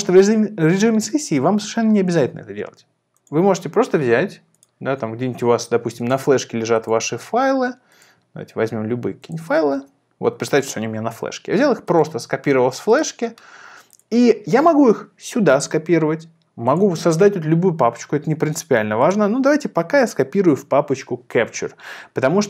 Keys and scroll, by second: 9.7 super+c.